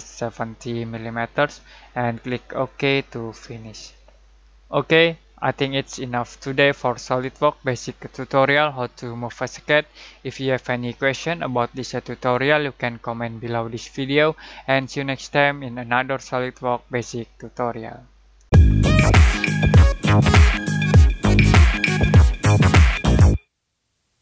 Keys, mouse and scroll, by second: 2.6-3.5 drag.